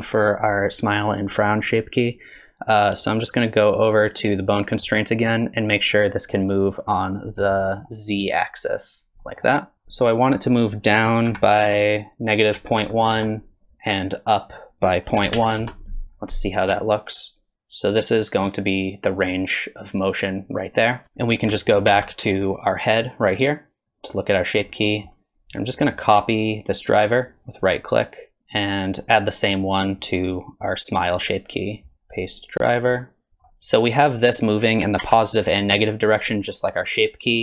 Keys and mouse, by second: 4.3 click, 7.5-7.8 middle drag, 9.2 middle click, 9.7-13.8 drag, 14.6-16.1 drag, 17.1-21.0 drag, 21.9 ctrl+Tab, 22.4 click, 23.1 middle click, 24.0 click, 24.9 middle click, 25.8-27.4 drag, 28.5 click, 31.4-32.8 drag, 34.2 click, 35.0 ctrl+Tab, 37.0-37.4 drag.